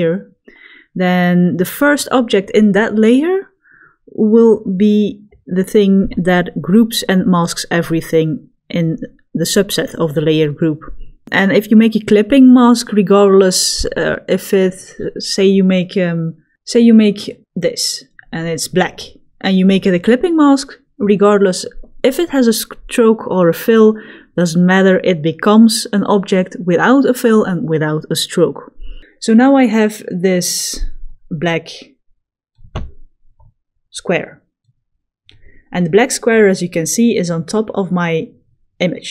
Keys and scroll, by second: 16.1 l, 30.1 v.